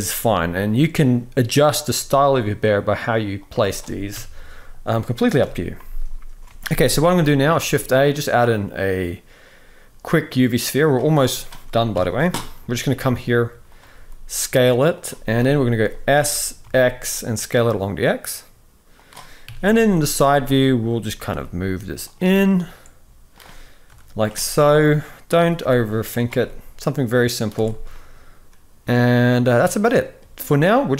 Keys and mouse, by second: 1.7 g, 3.8 KP_3, 5.1 KP_1, 6.3 alt+a, 6.7-7.1 shift+middle drag, 7.3 shift+a, 11.6 KP_3, 12.6 g, 13.7 s, 15.1 KP_1, 15.9 s, 19.2 KP_3, 20.0 f, 21.0 g, 22.2-23.6 middle drag, 23.6 KP_7, 24.3 shift+middle click, 25.1 g, 26.1-27.1 middle drag, 27.3 alt+a, 27.6-28.9 middle drag, 29.3-29.9 middle drag.